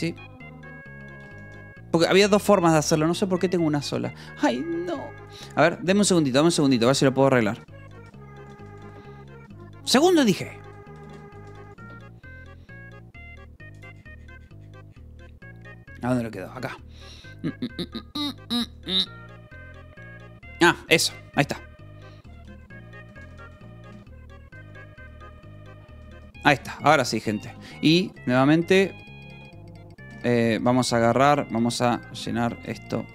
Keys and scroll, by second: 1.3 shift+k, 1.9 Escape, 6.8-9.0 typing, 9.9 ctrl+a, 10.2-11.9 typing, 22.2-27.9 typing, 24.1 ctrl+s, 30.0 Escape, 30.9 h, 32.6 Escape, 33.0 a.